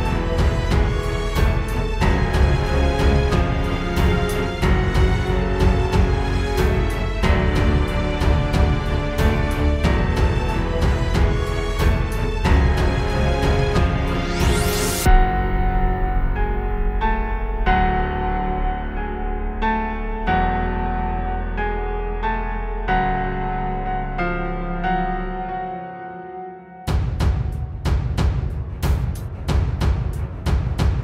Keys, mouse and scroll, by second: 6.0 click, 11.3 click, 15.1 click, 15.3 click, 18.7 middle click, 18.7-19.4 scroll up 3, 19.4 scroll up 1, 19.5 middle click, 23.5 click.